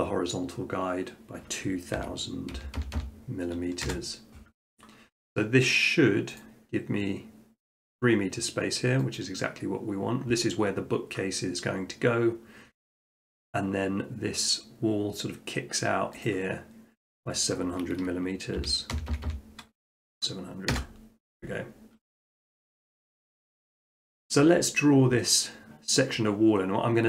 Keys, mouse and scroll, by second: 2.0-2.5 typing, 3.9 Return, 6.4-7.5 drag, 9.2-10.3 drag, 16.3-17.4 drag, 18.6-19.9 typing, 20.7 Return.